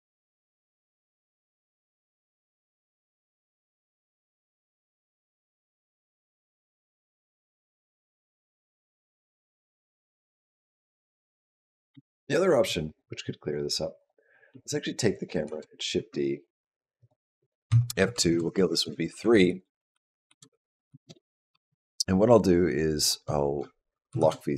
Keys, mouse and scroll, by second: 11.6 space, 13.8 click, 15.3 shift+d, 16.8 click, 17.5 F2, 18.3 BackSpace, 18.6 BackSpace, 19.3 Left, 19.4 Left, 19.7 Left, 19.9 Left, 20.7 shift+Left, 23.9 shift+Down.